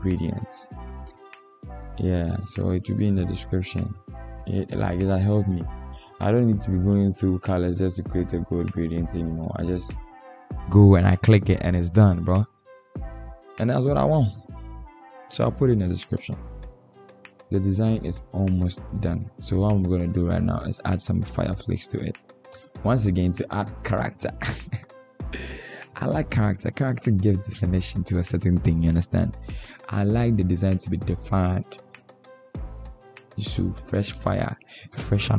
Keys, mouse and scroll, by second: 18.1 double click, 20.4 double click, 22.0 double click, 34.3 Return.